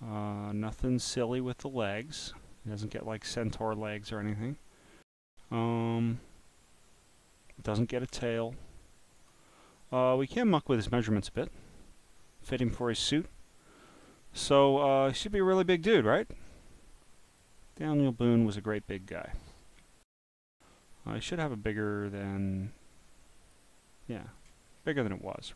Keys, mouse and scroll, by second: 9.2 click, 9.8 click, 10.3 click, 11.4 click, 12.2 click, 12.8-13.6 scroll down 7, 13.6 click, 14.6 click, 15.9-17.4 drag, 18.3-19.6 drag, 20.9-23.5 drag, 23.9 click.